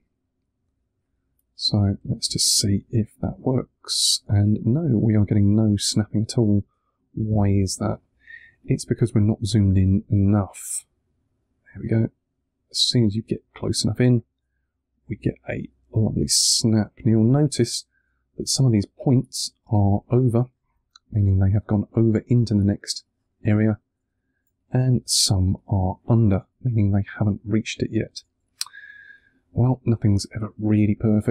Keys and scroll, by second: 1.6 2, 7.3 super+z, 8.0 2, 14.5 2.